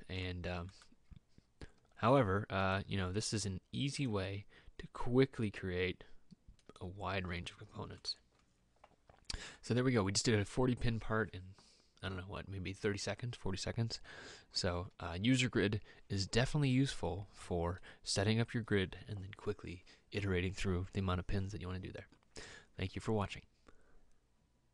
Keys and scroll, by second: 1.9 m.